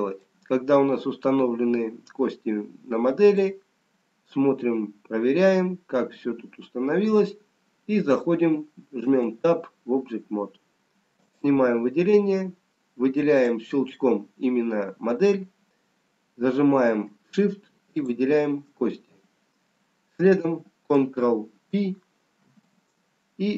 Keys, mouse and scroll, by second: 4.5 middle click, 9.5 Tab, 12.6 click, 12.6-13.4 scroll down 2, 13.4 click, 16.9-18.3 scroll up 3, 18.3 shift+click, 19.4 scroll down 3.